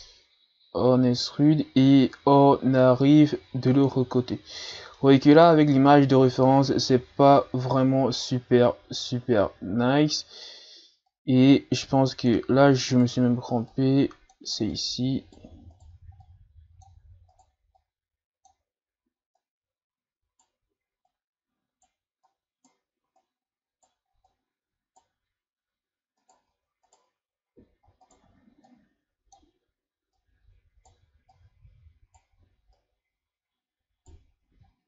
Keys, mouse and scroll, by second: 0.0 e, 4.3-4.7 scroll down 1, 5.0-8.0 middle drag, 11.1 click, 12.9 right click, 13.7 click, 14.7 right click, 15.7 right click, 16.2-17.3 drag, 17.3 right click, 17.8-19.4 drag, 19.4 right click, 21.1 right click, 22.3 right click, 23.2 right click, 24.3 right click, 26.2 right click, 26.9 shift+right click, 28.0 shift+right click, 28.6-30.2 drag, 30.2 right click, 31.3 right click, 32.8 right click, 34.5 z.